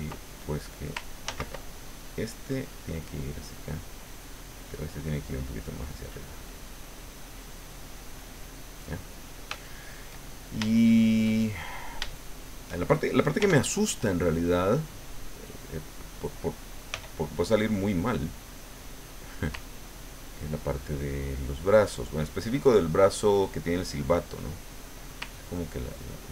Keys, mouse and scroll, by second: 1.3 ctrl+z, 1.8-3.6 ctrl+drag, 5.3-8.7 drag, 8.9 middle click, 9.5 shift+middle click, 10.1 shift+right click, 10.2 shift+middle click, 10.7-11.8 shift+middle drag, 12.1 shift+middle click, 13.4 f, 14.2 click, 16.9 f, 18.0 click, 20.0-22.2 ctrl+drag, 23.5 click, 24.3 click, 25.5-26.3 ctrl+drag.